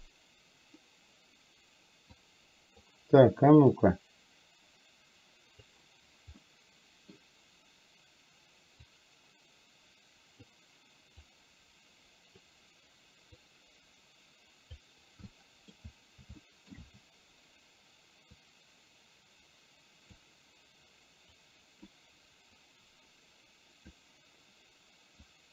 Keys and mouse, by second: 2.3 click, 3.9-5.8 drag, 6.4 middle click, 8.9-10.5 drag, 11.3-12.4 drag, 13.4-14.8 drag, 15.4 middle click, 16.5 shift+middle click, 18.4-20.3 drag, 21.4 click, 22.6-24.1 drag, 25.3-25.5 drag.